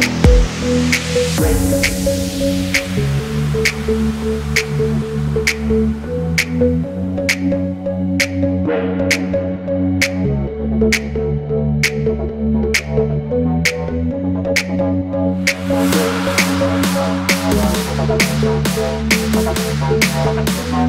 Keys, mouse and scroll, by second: 0.1-0.7 Right, 1.8-2.6 typing, 2.0 Return, 2.1 Return, 4.0 shift+click, 5.6 alt+scroll up 1, 6.6 space, 7.3 Delete, 7.8 alt+scroll up 1, 9.3 double click, 11.9 v, 12.4 double click, 12.6 alt+scroll down 1, 12.9 space, 13.7 alt+scroll up 1, 15.6 ctrl+c, 15.7 ctrl+f, 16.9 double click, 17.6 alt+scroll up 1, 18.0-18.6 typing, 18.9 alt+scroll down 1, 19.5 alt+scroll up 1.